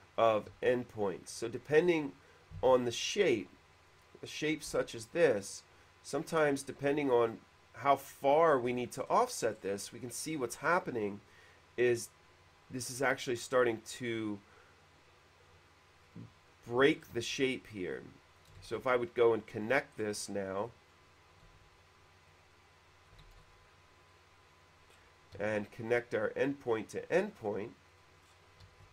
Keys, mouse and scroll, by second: 0.3 click, 0.7 q, 2.5 click, 2.7 space, 3.6 click, 4.4 middle click, 5.0 f, 5.3 click, 8.0 f, 9.1 middle click, 9.7 middle click, 16.3 click, 17.0 middle click, 17.3 q, 18.0 click, 18.5 click, 18.8 shift+e, 19.0 click, 19.6 click, 20.2 middle click, 20.8 click, 21.6 q, 23.3 click, 23.5 shift+e, 23.6 click, 24.3 click, 25.0 middle click, 25.2-26.2 typing, 26.6 click, 28.0 click, 28.4 middle click.